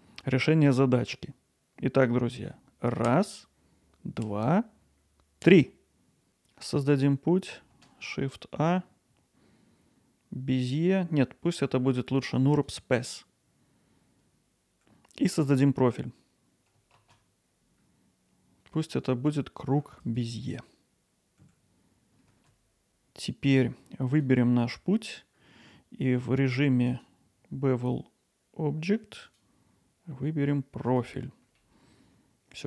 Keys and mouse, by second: 7.7 shift+a, 13.8 g, 14.0 shift+z, 15.1 alt+middle click, 21.1 g, 21.4 shift+z, 22.3 alt+middle drag, 22.5 click, 22.7 alt+middle click, 24.1-31.5 drag, 32.2-32.6 alt+middle drag.